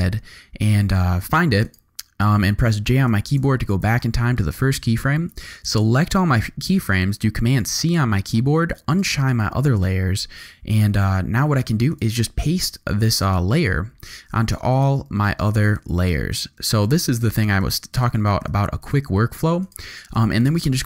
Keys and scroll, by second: 3.1 j, 7.5 super+c, 10.8 u, 14.1 super+v, 18.3 super+v.